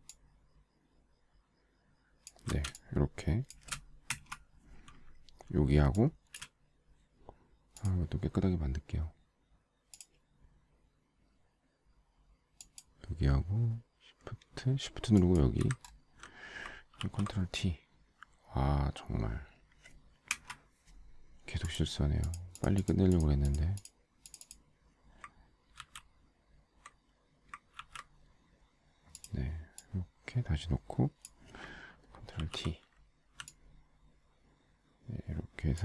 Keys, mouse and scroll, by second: 0.5 alt+shift+click, 3.0 space, 3.6 space, 3.6 space, 3.8 space, 4.5 Return, 6.1 space, 6.7 space, 7.4 space, 15.5 shift+click, 16.2 alt+scroll down 1, 17.4 ctrl+t, 20.7 Return, 26.2 ctrl+x, 28.2 ctrl+v, 32.8 ctrl+t, 33.9 alt+shift+click.